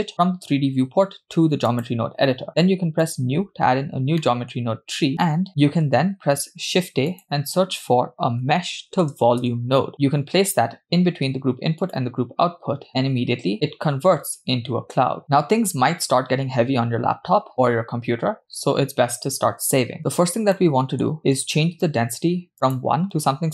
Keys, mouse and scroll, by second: 3.1-3.5 drag, 4.2 middle click, 4.7-5.1 scroll up 5, 6.1 shift+a, 13.3-14.1 scroll down 3, 13.5-14.1 scroll up 2, 20.0-20.5 scroll up 2, 20.6 middle click, 21.2 middle click, 21.2 scroll up 2, 22.5-23.5 drag.